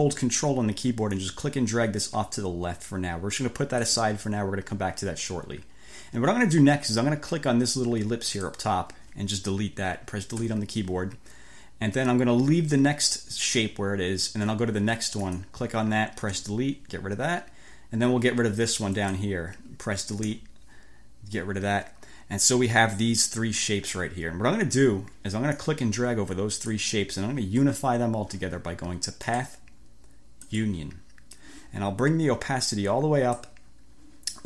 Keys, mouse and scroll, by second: 1.3-4.1 ctrl+drag, 8.3 click, 10.4 Delete, 15.3 click, 16.3 Delete, 19.0 click, 20.3 Delete, 25.6-26.9 drag, 29.3 click, 30.5 click, 32.8-33.6 drag.